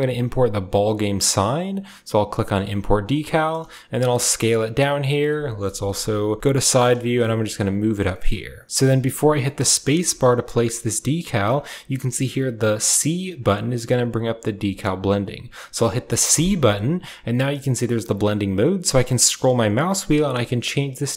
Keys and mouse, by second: 2.3-10.6 middle drag, 5.5 KP_1, 6.4 KP_3, 18.9-21.1 middle drag.